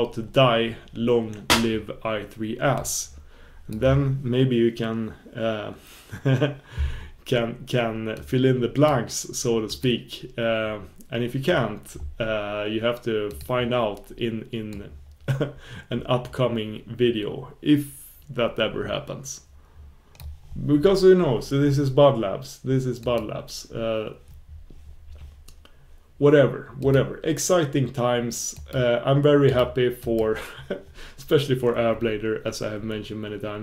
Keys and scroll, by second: 26.8 super+b.